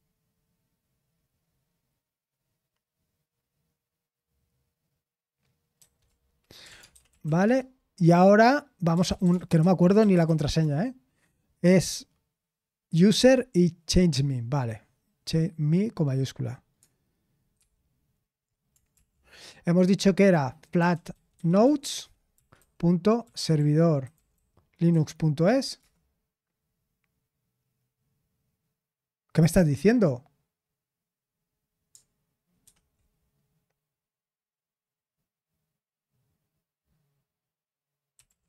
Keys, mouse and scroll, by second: 5.7 ctrl+c, 6.3-10.7 typing, 17.5 super+0, 18.9 ctrl+l, 20.3-25.7 typing, 24.9 Down, 25.8 Return, 32.6 super+7.